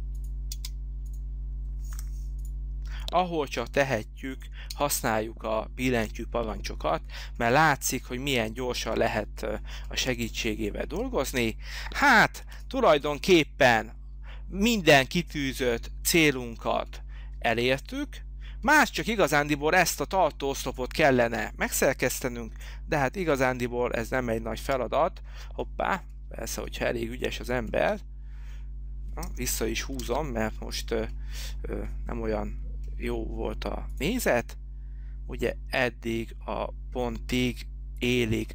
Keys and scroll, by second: 0.6 space, 2.1 p, 5.1 space, 12.6 h, 22.3 p, 30.2 ctrl+z.